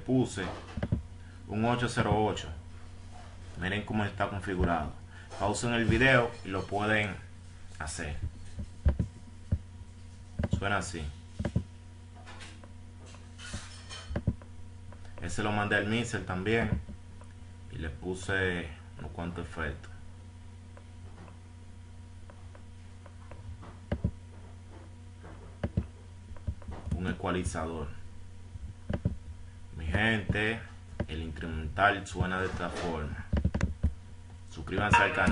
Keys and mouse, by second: 15.5 ctrl+F8, 15.8 F9, 17.5 click, 18.0-19.2 drag, 23.9 right click, 25.4 right click, 26.1-27.7 right drag.